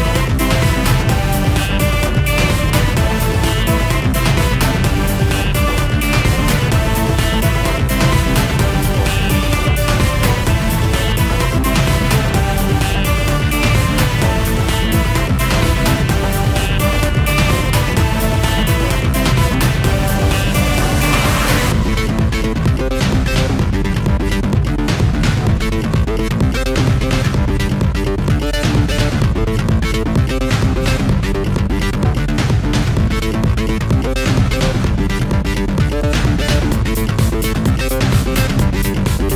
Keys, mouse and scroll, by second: 1.3 click, 2.3 ctrl+d, 3.1 click, 4.3 click, 4.6 ctrl+s, 5.2 ctrl+a, 6.3-8.1 typing, 8.9 click, 12.2 double click, 12.3 click, 12.5 double click, 12.8 click, 13.9 click, 16.9 click, 18.4 click, 21.0 shift+F5, 24.1 Escape, 24.7 click, 26.0 ctrl+d, 28.9 click, 29.5 ctrl+click, 30.4 click, 32.2 click, 33.0 click, 34.0 click, 37.6 click.